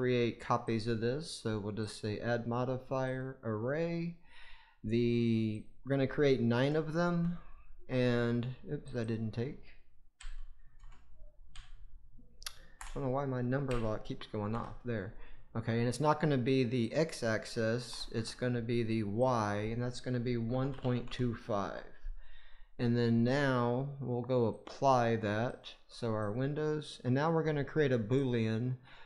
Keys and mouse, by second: 0.6 click, 1.8-3.1 drag, 5.4-7.1 drag, 8.8-14.4 drag, 16.9-18.1 drag, 19.1-21.5 drag, 24.5-25.5 drag, 26.1 click, 28.1 click.